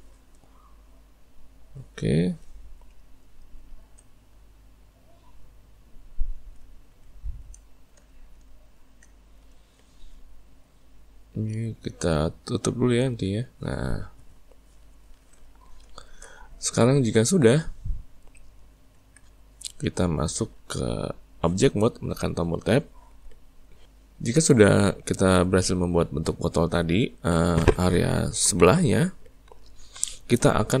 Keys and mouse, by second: 3.4-6.9 middle drag, 7.0 middle click, 7.2 ctrl+middle click, 7.9-12.2 ctrl+middle drag, 13.1 click, 14.8-18.9 ctrl+middle drag, 18.9 Tab, 22.7-26.8 middle drag.